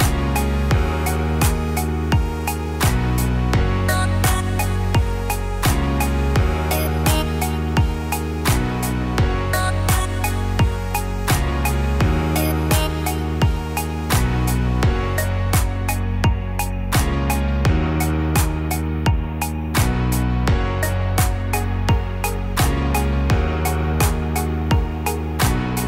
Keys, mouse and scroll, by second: 0.0 r, 1.3 e, 3.5 r, 5.5 g, 7.8 e, 9.8 r, 12.5 middle click, 16.3 KP_1, 18.3 KP_7, 19.6 e, 21.6 r, 24.1 e.